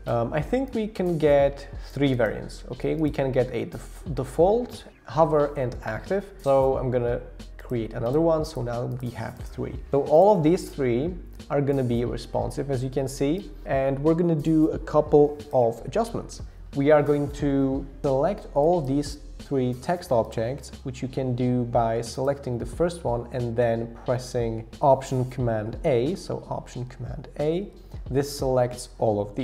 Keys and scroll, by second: 27.3 alt+super+a.